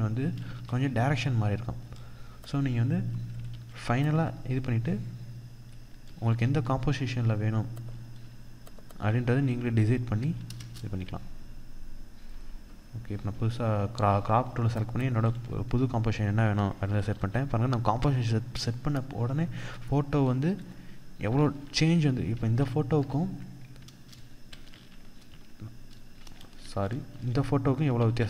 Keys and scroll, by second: 2.9 ctrl+-, 5.6 ctrl+=, 9.9 Return, 16.3 ctrl+=, 17.3 ctrl+0, 19.4 ctrl+0, 20.7 ctrl+z, 24.0 ctrl+shift+z, 24.6 ctrl+z, 25.9 ctrl+alt+z, 27.3 ctrl+z, 28.0 ctrl+alt+z.